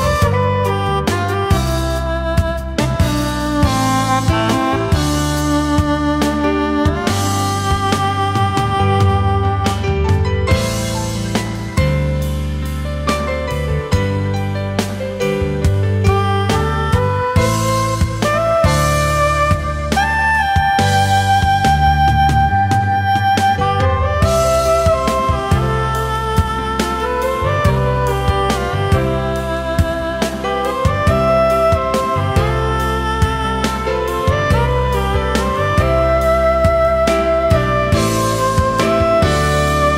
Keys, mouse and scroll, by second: 0.1 alt+click, 1.4 ctrl+shift+a, 15.7 ctrl+x, 18.7 ctrl+f, 21.2 ctrl+shift+a, 23.3 alt+scroll down 1, 24.3 alt+scroll up 1, 24.9 alt+click, 26.2 ctrl+shift+a, 28.2 alt+click, 29.9 ctrl+shift+a, 30.3 alt+scroll down 1, 30.6 space, 31.3 alt+scroll up 1, 31.4 space, 31.7 alt+click, 32.1 alt+click, 32.5 alt+click, 32.9 alt+scroll up 1, 33.0 alt+click, 33.3 alt+click, 33.5 ctrl+shift+a, 33.6 alt+click, 33.9 alt+click, 34.6 alt+click, 34.9 alt+click, 35.3 alt+click, 35.5 alt+scroll down 1, 35.5 space, 35.6 alt+scroll up 1, 35.9 alt+click, 36.1 alt+shift+click, 36.3 alt+scroll up 1, 36.4 alt+click, 36.7 alt+click, 36.9 alt+scroll down 1, 37.1 alt+click, 37.4 alt+click, 37.8 alt+click, 38.1 shift+click, 38.4 alt+click, 38.6 alt+click, 38.9 alt+click, 39.3 alt+click, 39.5 ctrl+shift+a, 39.6 alt+scroll down 1, 39.8 alt+scroll up 2.